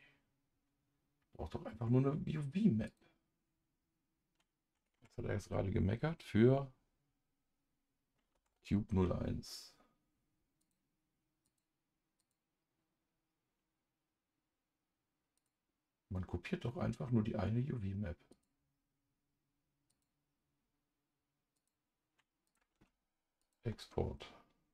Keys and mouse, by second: 10.6 click, 11.5 click, 12.2 click, 15.4 click, 18.3 click, 19.9 click, 21.6 click, 22.5 click, 22.8 ctrl+s, 23.4 click.